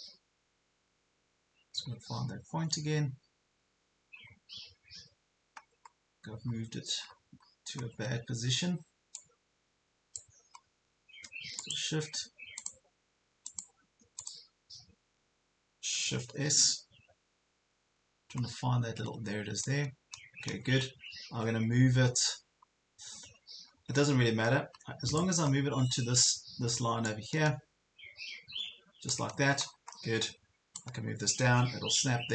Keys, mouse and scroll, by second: 3.7 ctrl+scroll up 1, 5.8 ctrl+scroll up 1, 6.4 ctrl+scroll up 1, 7.0-7.9 ctrl+scroll down 3, 9.2 click, 10.6 ctrl+scroll down 1, 11.6 shift+click, 12.6 click, 13.5 shift+click, 14.2 click, 16.4 shift+s, 18.4 ctrl+scroll up 1, 19.6-24.1 drag, 23.4 scroll down 1, 25.4 ctrl+scroll up 1, 26.0 ctrl+scroll up 1, 27.0-29.1 drag, 29.4 ctrl+scroll down 1, 30.9-32.3 drag.